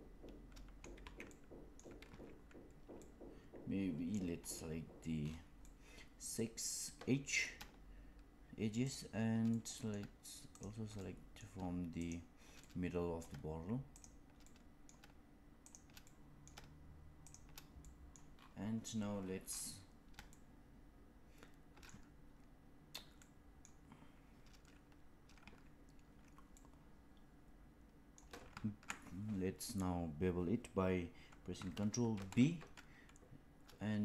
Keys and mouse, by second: 1.0 ctrl+z, 1.2 middle click, 2.0 ctrl+z, 3.0-4.0 middle drag, 5.6-7.3 middle drag, 8.7 shift+click, 9.4 middle click, 10.4 shift+click, 10.9 middle click, 12.0 shift+click, 12.5 middle click, 13.8 shift+click, 14.3 middle click, 15.6 shift+click, 16.0 middle click, 17.2 shift+click, 17.7 middle click, 20.2-22.9 shift+middle drag, 23.1 middle click, 26.5-28.1 middle drag, 32.0 ctrl+b.